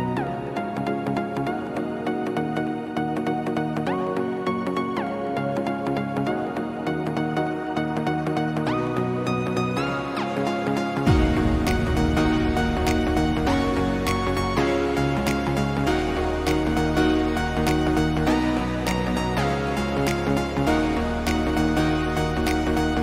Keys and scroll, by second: 10.6 ctrl+alt+z.